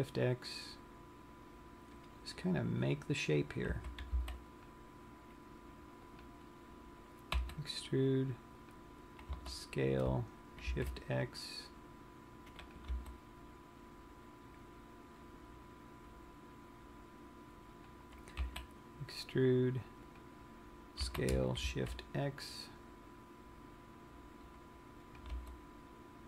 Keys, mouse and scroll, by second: 3.3 click, 4.1 a, 4.8 c, 7.2 right click, 8.0 e, 9.4 click, 9.9 s, 13.4 click, 13.4 g, 18.5 click, 18.9 e, 20.8 click, 21.7 s, 25.7 click, 26.0 g.